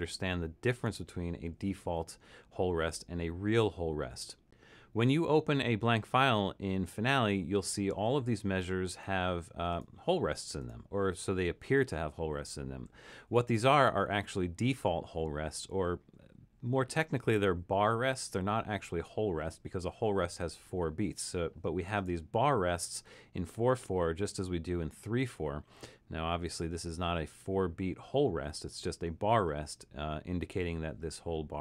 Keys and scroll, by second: 0.7 super+=.